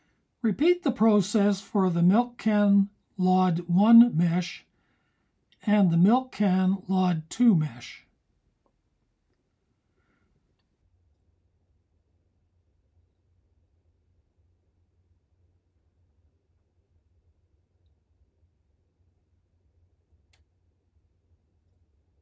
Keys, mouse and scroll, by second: 4.0 click, 7.8-13.8 drag.